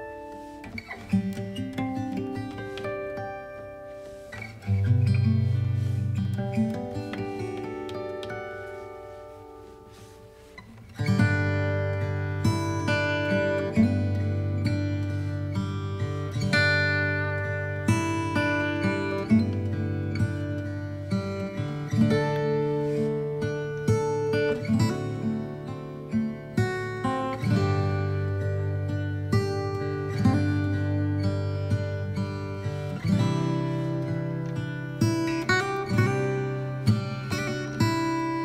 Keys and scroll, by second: 36.1 space.